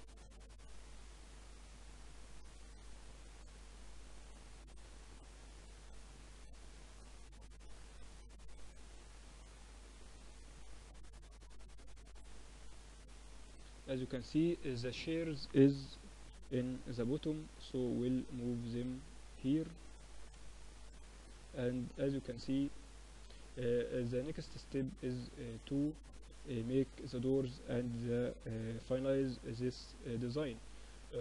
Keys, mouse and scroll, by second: 2.8-4.2 drag, 4.1 right click, 4.2 middle click, 4.7 click, 5.2 z, 5.5 middle click, 7.0 KP_1, 10.9 middle click, 11.7 KP_1, 12.5 KP_3, 13.7 z, 14.1 a, 14.9 b, 16.7-18.7 drag, 18.7-21.8 middle drag, 21.8-23.7 drag, 25.3 z, 25.7-31.2 middle drag.